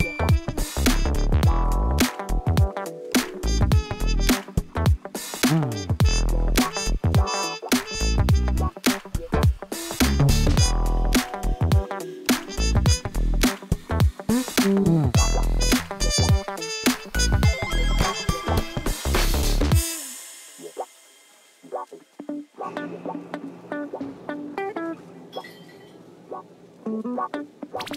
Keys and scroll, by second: 0.7 Tab, 1.9 g, 2.5 shift+z, 5.4 Tab, 5.7 shift+z, 7.7 shift+z, 8.2 g, 8.3 x, 11.6 Tab, 16.1 Tab, 20.9 u, 21.7 Tab, 24.9 ctrl+z, 27.4-27.9 typing.